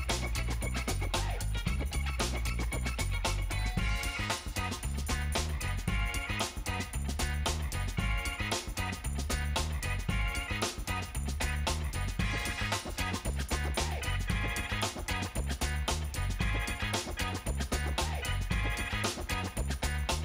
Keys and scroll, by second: 7.6 space.